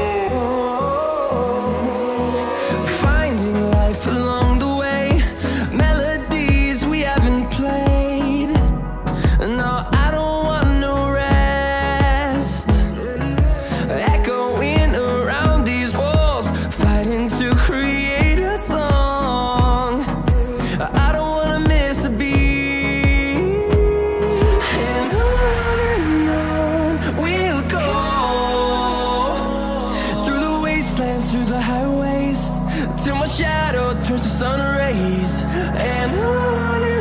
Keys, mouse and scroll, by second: 3.1-8.3 drag, 8.4-16.0 drag, 16.3-30.2 drag, 30.5-33.8 drag, 34.0-36.9 drag, 36.9 ctrl+z.